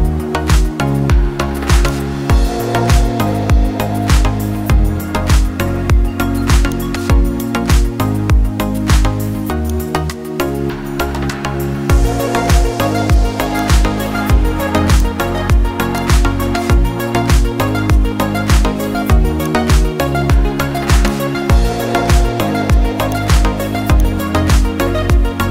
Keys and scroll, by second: 22.8 ctrl+alt+space.